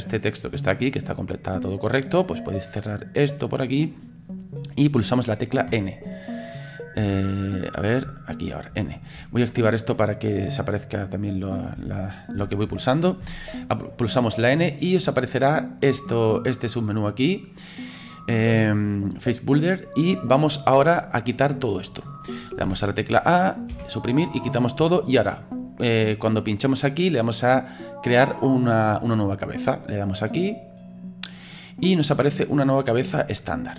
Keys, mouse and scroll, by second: 12.4 n, 16.2 click, 23.7 Delete, 26.0 click, 29.7-31.4 drag, 31.9-33.7 middle drag.